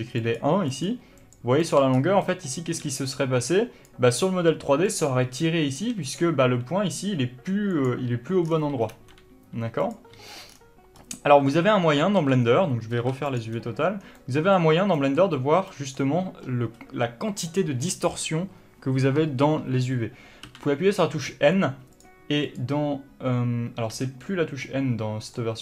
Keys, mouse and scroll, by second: 0.0-1.8 typing, 2.0 scroll up 1, 2.3 middle click, 2.9 d, 3.0-6.2 drag, 3.9 d, 5.8 d, 6.5 g, 7.9 click, 8.5-9.0 scroll down 1, 9.0 n, 9.9-14.2 drag, 10.2 n, 10.5-11.0 scroll down 1, 11.0-11.5 scroll up 2, 11.5 a, 12.9 scroll up 2, 13.0 u, 14.1 scroll down 2, 14.2-19.7 middle drag, 22.0 click, 22.5 click, 24.0 n, 24.7-25.6 middle drag.